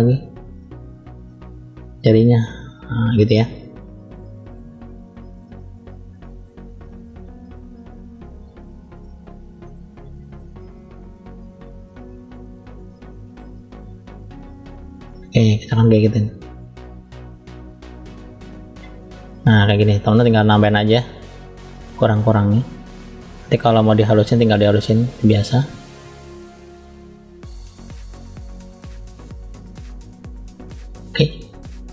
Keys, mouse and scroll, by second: 0.9-2.1 drag, 3.1 middle click, 4.1 click, 5.1 click, 6.7 middle click, 7.9 click, 9.3 middle click, 10.5 click, 11.1 middle click, 12.2 click, 15.5 middle click, 16.6 click, 17.5 scroll up 1, 18.2 shift+middle click, 18.2 scroll up 1, 19.2 middle click, 20.2 click, 23.7 click, 24.4 click, 25.2 middle click, 26.1 click, 27.6 click, 29.5 click, 30.6 middle click, 31.8 click.